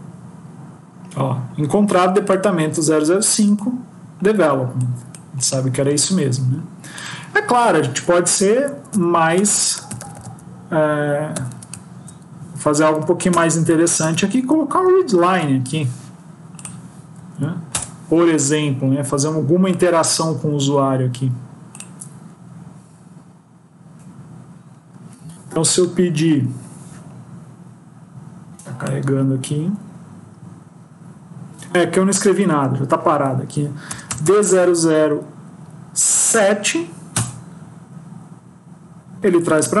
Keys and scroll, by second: 7.8 ctrl+shift+Left, 8.5 shift+Left, 12.6 Down, 12.9 Down, 13.2 Return, 15.1 ctrl+s.